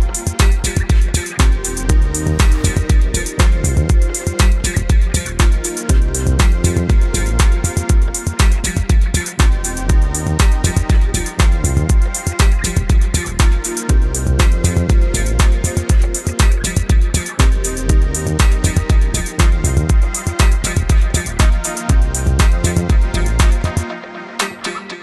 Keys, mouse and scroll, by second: 0.2 ctrl+alt+click, 1.3 click, 1.5 space, 1.9 click, 2.5 right click, 2.7 click, 4.1 ctrl+0, 4.5-5.2 typing, 4.7 click, 5.3 click, 6.5 right click, 7.7 click, 10.2 right click, 11.3 click, 15.2 right click, 16.1 click, 19.4 KP_2, 19.7 KP_0, 20.2 KP_Enter, 21.7 click, 24.9 KP_2.